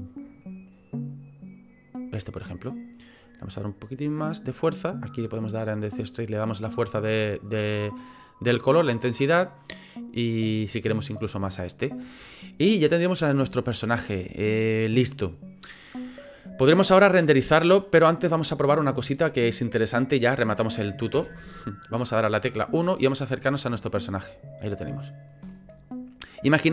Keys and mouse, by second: 4.4-5.4 drag, 5.4 click, 6.6-7.9 drag, 14.2-15.7 middle drag, 21.1 KP_1, 23.5 shift+middle click, 25.5 shift+middle click.